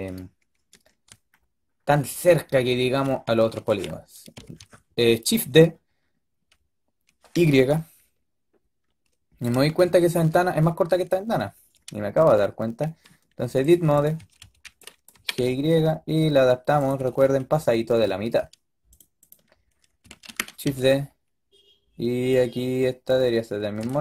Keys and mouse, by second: 2.0 middle click, 4.3 shift+d, 14.0 a, 14.3 a, 14.5 b, 15.0 g, 16.8 a, 17.1 a, 17.4 a, 19.2-20.1 drag, 20.1 shift+d.